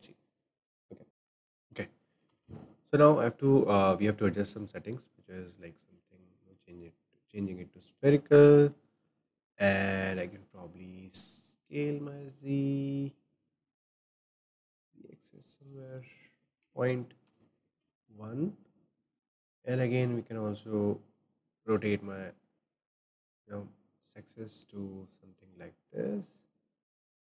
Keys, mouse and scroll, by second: 2.3 ctrl+z, 3.8-5.7 drag, 5.7-11.4 shift+middle drag, 7.3-7.6 scroll up 3, 8.3-8.7 scroll up 2, 11.4-14.5 drag, 15.9-19.0 drag, 21.6-24.7 drag.